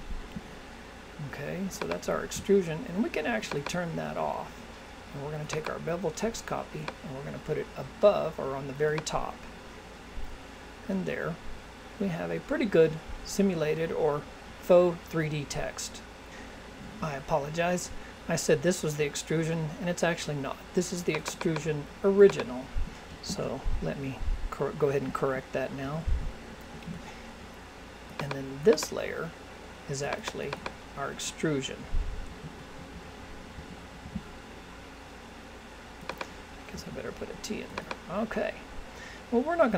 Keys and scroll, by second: 23.3 shift+o.